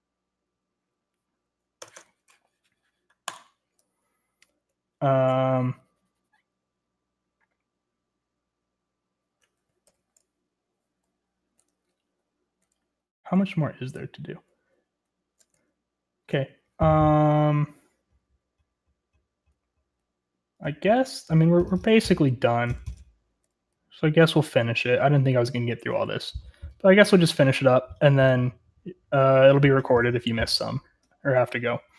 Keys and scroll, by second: 1.8 Escape, 1.9 Escape, 4.4 j, 4.5 j, 4.6 j, 5.7 j, 6.9 j, 10.8 ctrl+g, 11.8 j, 12.0-16.5 j, 16.5-17.7 k, 19.4 k, 19.7-21.8 k, 22.4-24.5 k, 24.7 k, 26.4-26.9 j, 27.3 j, 27.3 j, 31.0-31.4 j.